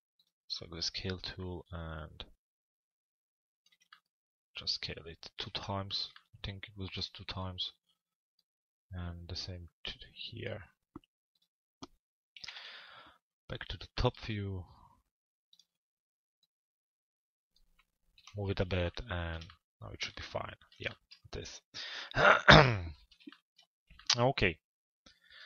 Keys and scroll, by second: 12.0 t, 12.6 z, 17.7 p.